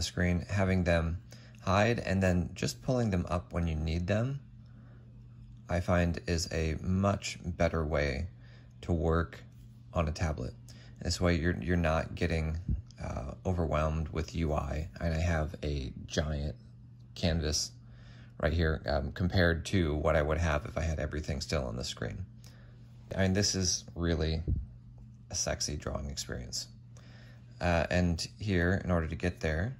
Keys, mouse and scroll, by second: 0.2 Tab, 2.3 Tab, 3.6 F8, 4.3 F6, 5.0 F8, 5.5 F5, 6.8 F5, 23.1 typing.